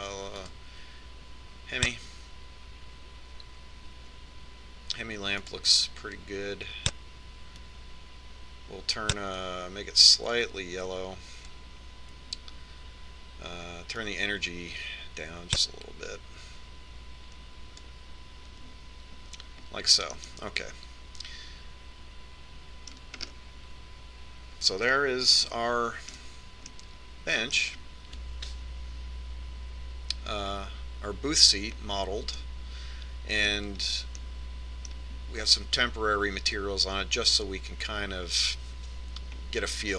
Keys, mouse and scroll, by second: 2.0-3.5 drag, 6.8-8.5 drag, 15.5-17.6 drag, 21.5-26.7 middle drag, 27.0-31.1 middle drag, 33.9-37.5 middle drag.